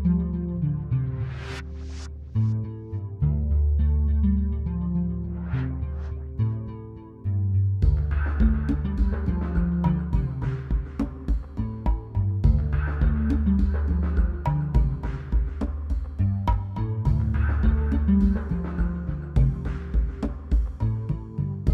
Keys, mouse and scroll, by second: 7.9 click, 11.3-16.3 drag.